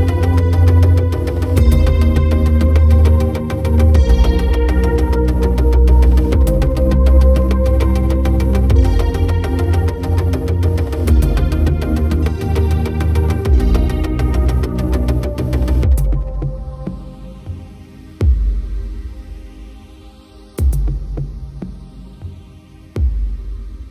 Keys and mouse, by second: 0.3 right click, 0.7 right click, 1.2 right click, 1.6 right click, 2.3 right click, 2.5 right click, 3.0 right click, 3.3 right click, 4.2 right click, 4.8 right click, 7.1 right click, 7.5 right click, 8.9 right click, 9.1 right click, 10.2 right click, 10.7 right click, 11.2 right click, 12.1 right click, 12.7 right click, 13.7 right click, 14.2 right click, 14.7 b, 16.3 right click, 17.5 right click, 17.8 b, 18.8 right click, 19.2 right click, 20.3 right click, 21.2 right click, 22.0 right click, 22.4 right click, 22.8 right click, 23.7 right click.